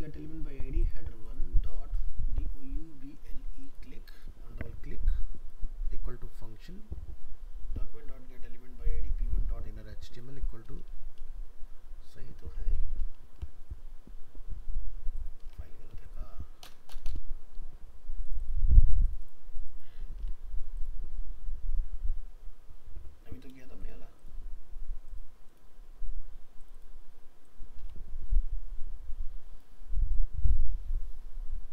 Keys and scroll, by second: 12.8 ctrl+s, 15.5 alt+Tab, 20.2 alt+Tab, 27.8 alt+Tab.